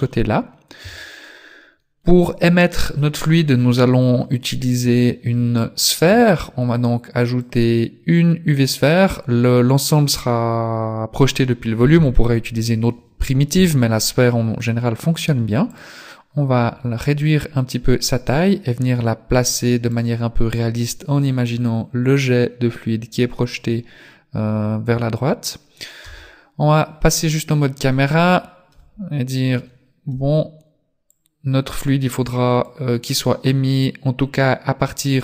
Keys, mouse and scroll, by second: 0.9 Tab, 6.1 shift+a, 13.5 s, 16.9 g, 26.1 KP_0, 27.4-28.7 scroll up 2, 28.7 z, 30.1 z, 31.2 click.